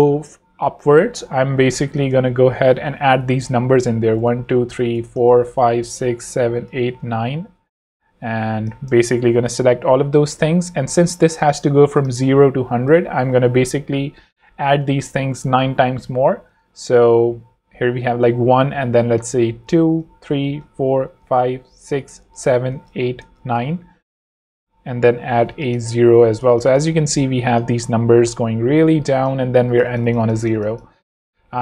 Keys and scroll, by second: 2.0 Return, 2.3-7.4 typing, 2.7 Return, 3.3 Return, 4.4 Return, 9.1 shift+super+a, 9.2 super+c, 10.1 super+Escape, 11.2 super+Escape, 12.7 super+Down, 12.9 super+Right, 13.8 Right, 16.5 Return, 19.5 super+v, 19.9 super+Return, 20.1 super+v, 20.5 super+Return, 20.7 super+v, 21.1 super+Return, 21.3 super+v, 21.7 super+Return, 21.9 super+v, 22.2 super+Return, 22.4 super+v, 22.7 super+Return, 22.9 super+v, 23.2 super+Return, 23.4 super+v, 24.9 Return, 25.0 0, 25.2 Escape, 25.5 alt+z, 26.6 z, 27.0 v, 28.9 z.